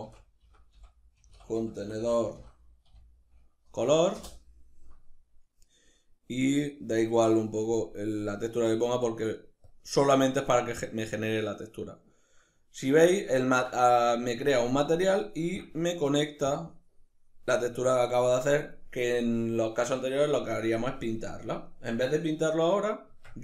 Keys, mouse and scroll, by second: 12.2-15.3 ctrl+middle drag, 15.3 click, 16.2-23.4 drag.